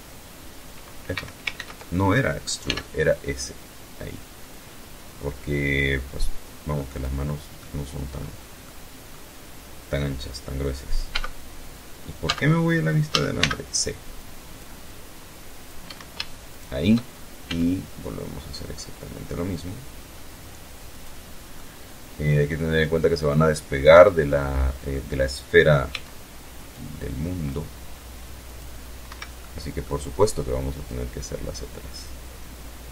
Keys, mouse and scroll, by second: 0.0 ctrl+z, 1.1 s, 5.3 click, 6.0 middle click, 7.0 middle click, 9.5 z, 10.6 z, 11.5 a, 11.8 c, 12.6 click, 13.3-14.3 drag, 14.3 Escape, 14.9 shift+right click, 15.9 s, 19.4 click, 19.7 scroll down 2, 19.9-21.4 middle drag, 21.6 scroll up 2, 22.3-23.4 middle drag, 24.3 c, 25.1-26.1 drag, 26.8 click, 27.5 Escape, 27.7 middle click, 28.0 scroll up 1, 29.2-32.9 drag.